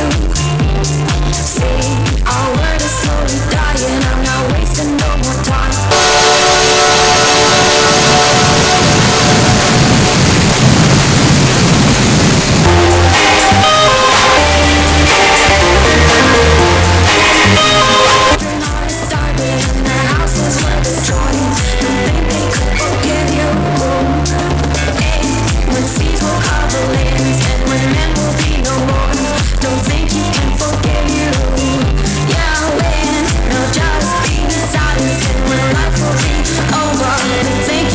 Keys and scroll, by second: 19.2 Page_Down.